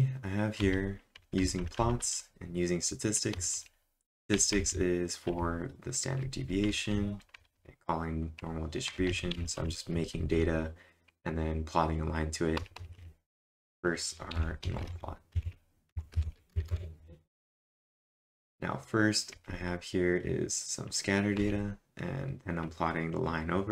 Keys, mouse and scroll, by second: 0.6-2.5 typing, 5.0-10.4 typing, 12.6 typing, 14.1-16.7 typing, 16.7 Return, 17.8 j, 19.4 j, 21.2-22.1 typing, 23.5-23.7 typing.